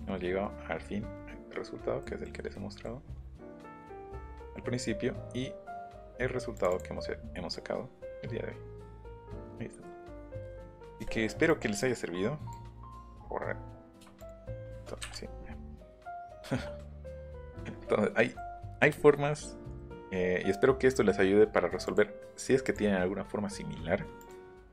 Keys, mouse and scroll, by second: 2.0 middle click, 3.7 click, 4.4 click, 5.8 click, 8.9 middle click, 11.5 click, 12.5 click, 14.2 shift+click, 15.4 middle click, 16.3 shift+middle click, 16.9 middle click, 17.0 scroll down 1, 17.2-17.8 scroll up 1, 18.2 middle click, 19.8 middle click, 20.1 scroll down 1, 20.3 scroll up 1, 21.8 click, 22.6 click, 24.2 click, 24.4 middle click.